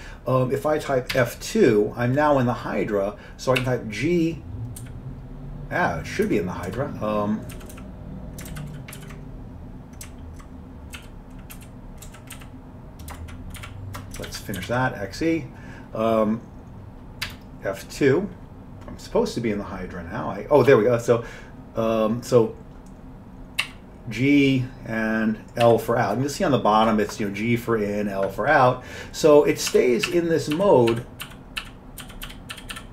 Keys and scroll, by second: 1.2 F2, 3.6 h, 4.8 h, 7.6 Down, 7.7 Down, 8.5 ctrl+x, 9.0 ctrl+e, 11.0 q, 11.6 Right, 12.1 Left, 12.4 Down, 13.6 ), 14.3 ctrl+x, 14.6 ctrl+e, 17.3 F2, 23.6 g, 25.6 l, 29.5-32.9 typing.